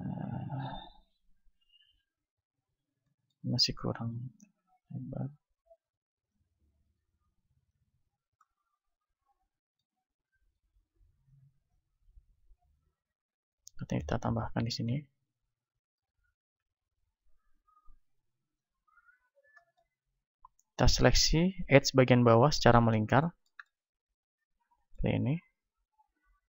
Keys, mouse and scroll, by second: 3.6-8.5 drag, 3.6-8.8 right drag, 8.8 click, 9.1-10.5 middle drag, 10.5-12.1 right drag, 11.0-14.5 drag, 13.1 a, 13.9 ctrl+r, 14.7-16.5 drag, 16.0-17.7 right drag, 16.5 KP_1, 17.3-21.7 drag, 19.5 middle click, 21.7-23.3 right drag, 23.3-26.5 middle drag, 25.4 KP_1.